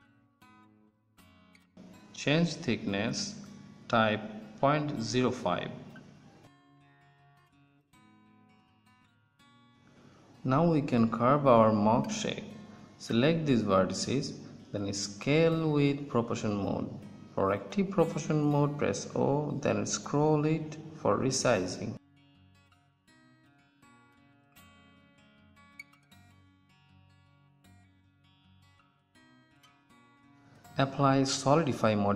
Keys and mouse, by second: 4.4-6.4 drag, 9.7 KP_1, 11.2 Tab, 13.2 ctrl+z, 13.2 o, 13.3 s, 19.9 Tab, 21.2 ctrl+s, 21.6 Tab, 26.7 middle click, 28.1 Tab, 28.9 Tab, 29.7 Tab, 31.4 click.